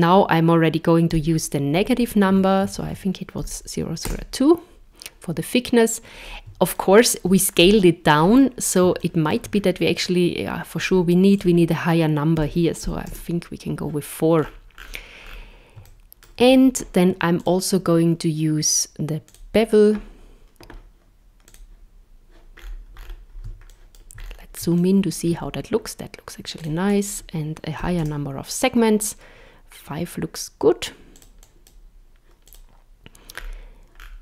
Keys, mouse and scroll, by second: 1.9 Right, 2.1 Right, 6.1-6.5 scroll up 2, 6.8 shift+middle click, 7.5-8.3 scroll up 8, 9.0 shift+middle click, 9.5 scroll up 2, 10.8 click, 14.4-15.3 scroll down 15, 15.8 shift+middle click, 17.4 click, 21.5 click, 22.6-23.7 scroll up 7, 23.7 shift+middle click, 24.2 scroll up 2, 24.8 shift+middle click, 26.6 click, 31.2 click, 33.3-34.2 scroll down 12.